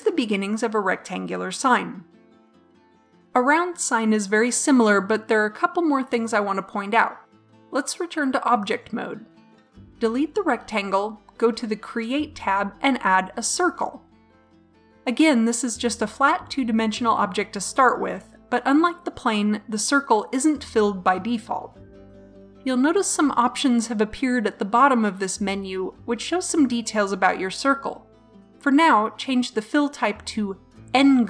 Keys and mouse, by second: 7.5 Tab, 8.5 Delete, 9.5 shift+c, 12.2-17.4 drag, 30.6-31.2 drag.